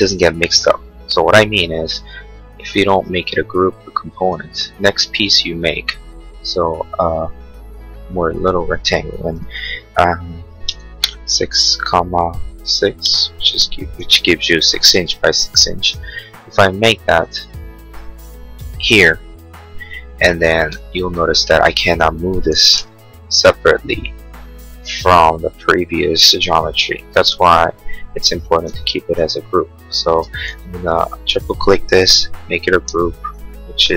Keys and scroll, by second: 5.0 r, 10.2-11.1 typing, 13.0 Return, 14.9 p, 15.5 p, 20.5 space, 22.8 m, 27.2 Escape, 28.2 ctrl+z, 30.0 space, 32.9 g.